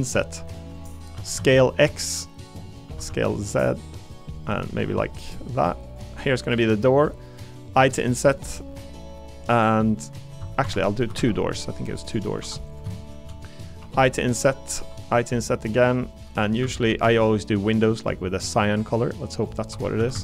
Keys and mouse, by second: 0.7 click, 1.1 s, 1.3 x, 2.5 click, 2.8 s, 3.0 z, 3.7 click, 4.3 click, 10.6 Escape, 11.1 ctrl+r, 12.4 3, 12.7 click, 13.0 shift+click, 13.8 i, 14.7 i, 16.6 a, 16.9 g, 19.4 click, 19.7 3, 20.0 a, 20.1 a.